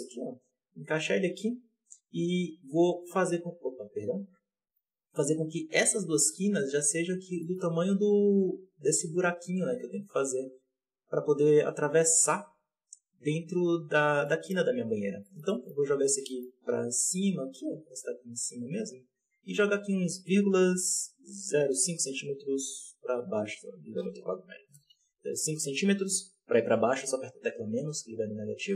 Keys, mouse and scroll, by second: 2.0 click, 3.0-4.2 drag, 4.2 alt+a, 4.5 right click, 4.9 shift+right click, 5.7-7.1 drag, 7.1 scroll down 2, 7.3 shift+middle click, 7.5-8.3 scroll up 2, 8.3-10.1 drag, 11.0-12.5 drag, 13.0 s, 14.2-14.5 middle drag, 14.5 z, 15.0 scroll down 1, 15.1-15.6 shift+middle drag, 15.6 scroll up 1, 16.0 scroll down 2, 16.2 shift+middle click, 16.3 scroll up 1, 16.6 g, 19.4 g.